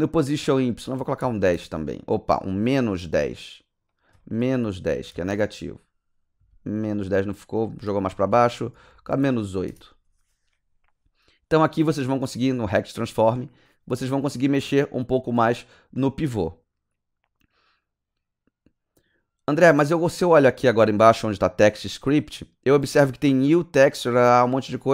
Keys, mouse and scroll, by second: 1.0 KP_1, 1.2 KP_0, 1.5 KP_Enter, 2.7 click, 3.0 click, 3.9 click, 4.6 KP_Subtract, 4.9 KP_1, 5.1 KP_0, 5.3 KP_Enter, 7.2 click, 8.3 Right, 8.7 BackSpace, 8.9 BackSpace, 9.2 KP_8, 9.7 KP_Enter.